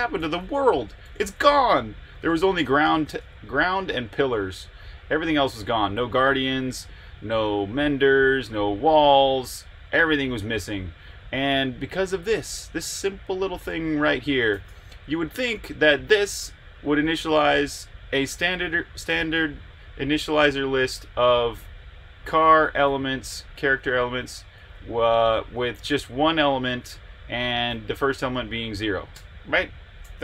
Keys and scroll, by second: 0.0-1.3 typing, 10.7-11.9 typing, 14.2-15.4 typing, 18.1 Escape, 20.9 typing, 22.2-26.2 typing, 27.5-28.2 typing, 29.1 Escape.